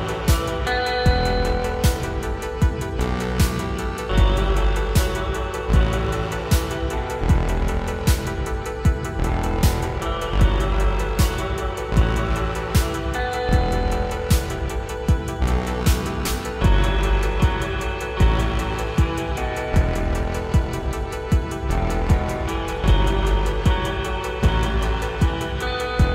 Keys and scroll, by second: 8.6 Tab, 9.2 Tab, 14.0 Tab, 15.8 Tab, 21.1 Tab.